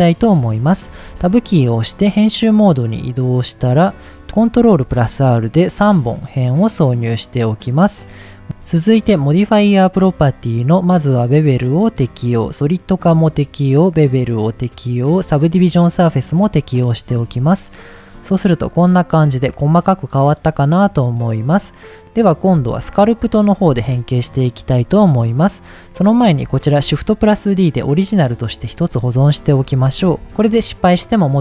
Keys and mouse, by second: 1.0 Tab, 2.2-3.3 middle drag, 4.2 ctrl+z, 4.5 ctrl+r, 6.8 right click, 8.4 click, 8.4 Tab, 10.9-11.6 drag, 12.4-13.0 drag, 13.8-14.6 drag, 15.6-16.6 drag, 17.2 Tab, 17.8 middle click, 20.8 middle click, 22.4 Tab, 26.7 shift+d, 27.4 right click, 28.5 click, 28.7-30.4 drag.